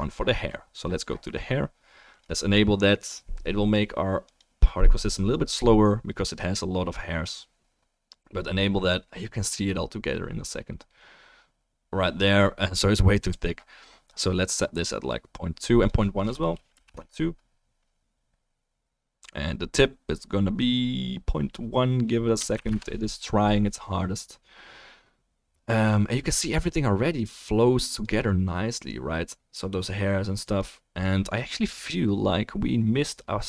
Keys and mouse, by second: 0.8-3.0 middle drag, 3.0 click, 3.2-3.7 right drag, 4.2-9.1 right drag, 9.1 middle click, 9.9 middle click, 10.7-28.0 drag, 10.7-33.4 right drag, 30.4 click.